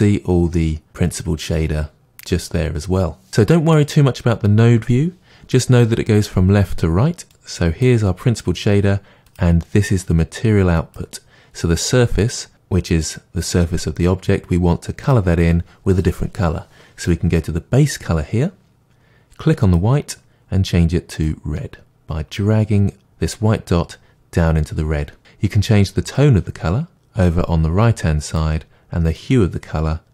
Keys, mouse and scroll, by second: 9.3 click.